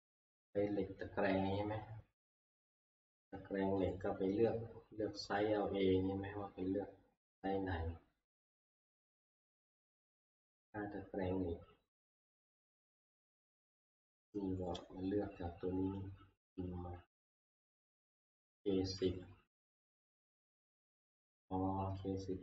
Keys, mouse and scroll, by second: 3.9 click, 8.9 click, 14.7-16.4 drag, 17.1 Left, 17.1 click, 20.2 F2.